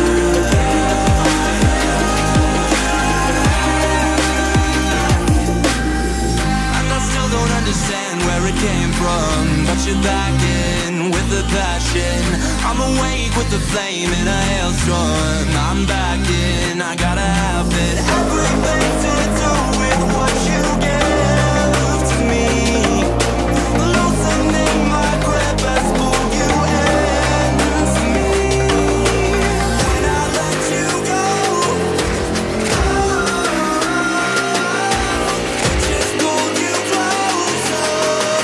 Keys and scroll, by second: 37.2 ctrl+z.